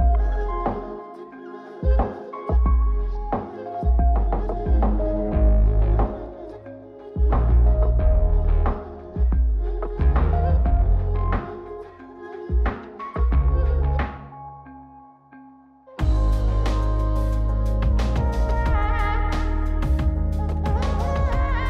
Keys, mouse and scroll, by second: 0.7-6.4 drag, 8.0 click, 9.5-10.4 middle drag, 10.8 click, 11.6 shift+click, 12.6 ctrl+c, 18.9-20.5 middle drag, 21.5 click.